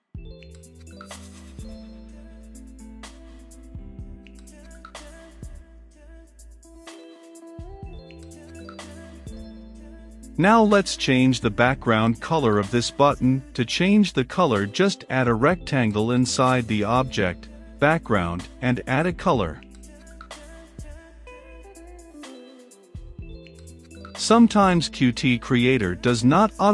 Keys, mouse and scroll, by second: 0.3 click, 1.1 Return, 1.5-6.3 typing, 3.7 Return, 8.7-10.0 drag, 10.0 Return, 12.8 shift+b, 13.1 a, 13.5 c, 13.8 k, 14.2 Return, 14.9-16.0 typing, 16.6 Return, 17.2-18.7 typing, 17.5 Return, 19.7 Return, 20.7 shift+`, 21.8 shift+3, 22.0 f, 23.0 click, 23.6 right click, 24.0-26.7 drag.